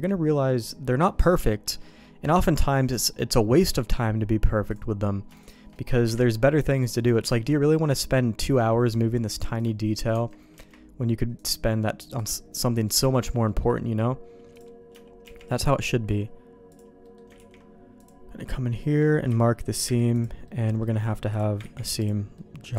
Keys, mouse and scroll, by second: 1.4 middle click, 2.0 middle click, 3.1 middle click, 4.7 click, 5.4 shift+click, 6.0 KP_Divide, 6.7 middle click, 7.3 alt+a, 9.6 click, 10.1 Tab, 10.5 Tab, 11.4 click, 13.0 Tab, 13.5 middle click, 14.5 click, 15.2 shift+g, 17.0 middle click, 17.4 ctrl+e, 18.7 middle click, 19.3 a, 19.8 u, 20.5 middle click, 21.3 click, 21.8 ctrl+e, 22.4 middle click.